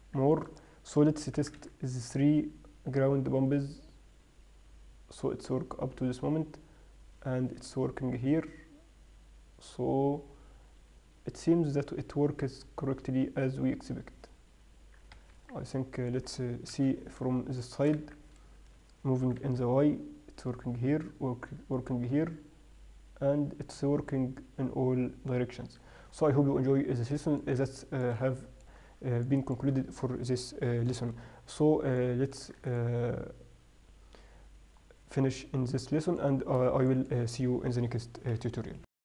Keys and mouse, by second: 0.3 Tab, 0.9 right drag, 1.8 g, 17.1 KP_3, 18.4 z, 19.6 g, 26.9 z, 35.0 middle drag, 35.3 middle click, 35.7-37.3 middle drag.